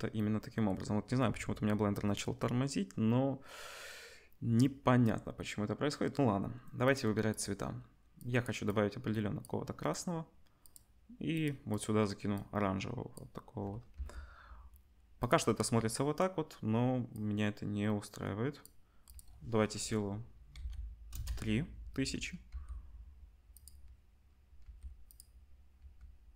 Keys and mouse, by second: 6.8 click, 10.6-11.8 drag, 14.0-17.1 middle drag, 14.0 g, 17.1-23.6 drag, 22.5 g, 23.6-26.3 middle drag, 24.6 g, 25.8 g.